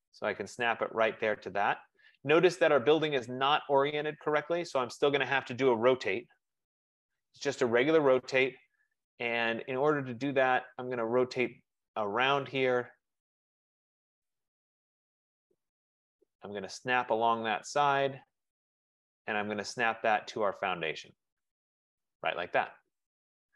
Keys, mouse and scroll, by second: 2.3 click, 6.2-7.5 typing, 7.0 click, 12.2 Return, 12.4 right click, 13.1 right click, 14.5 right click, 14.5 click, 17.4 right click, 17.4 click, 19.7 right click, 21.5 click.